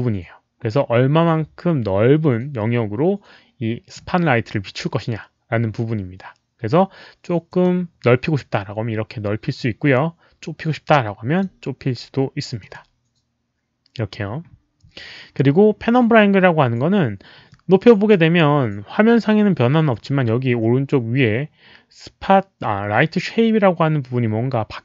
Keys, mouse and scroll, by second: 7.4 click, 10.6 click, 12.5 click, 17.4-18.1 drag, 23.4 click.